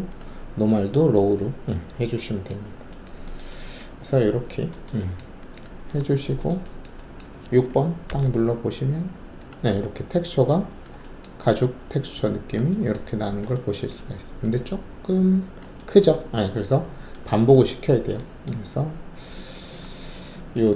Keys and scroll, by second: 8.0 alt+6.